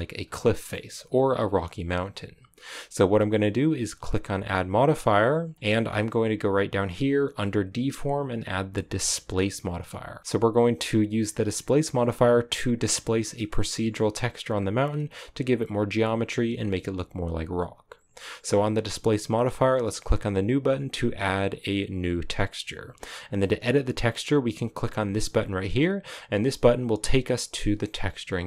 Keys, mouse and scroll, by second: 0.1-0.6 scroll down 2, 0.6-9.3 shift+middle drag, 10.2-10.7 scroll down 1, 10.7-13.3 scroll down 1, 13.3-14.4 shift+middle drag, 14.4-20.7 scroll down 1, 20.7-28.4 drag.